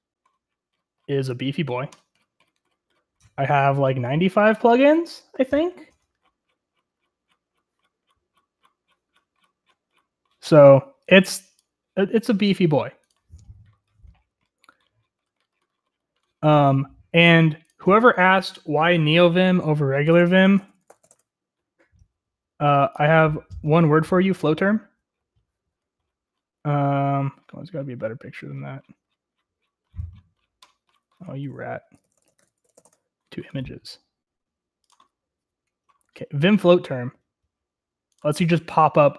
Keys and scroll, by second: 19.9-22.0 typing, 31.4 ctrl+t, 31.8-33.4 typing.